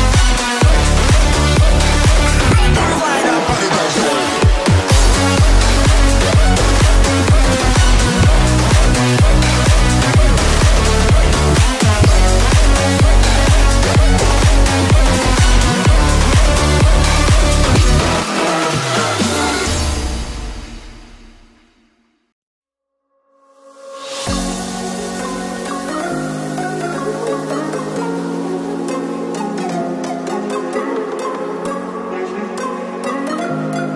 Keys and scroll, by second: 3.2 space, 6.4 space, 12.4 space, 21.2 space.